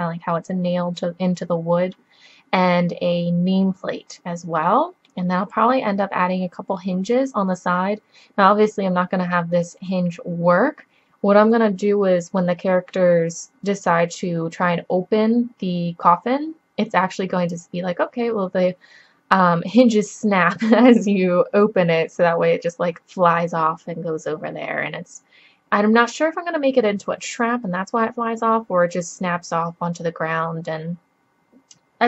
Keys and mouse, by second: 6.6-32.0 middle drag.